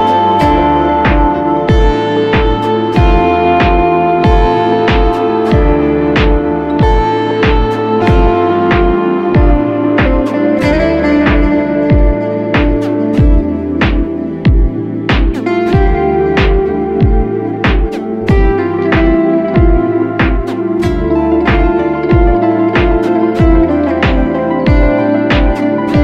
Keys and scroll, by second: 3.2 super+=, 3.7 super+=, 4.4 space, 4.8 space, 4.9 space, 7.7 space, 8.2 space, 8.3 space.